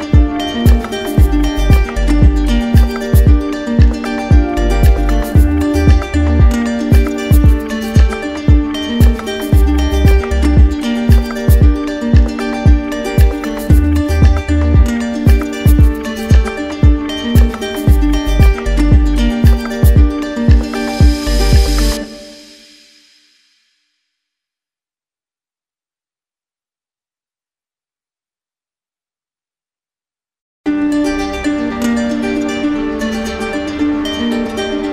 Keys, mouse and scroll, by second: 18.9-21.0 right drag, 22.5-24.1 right drag.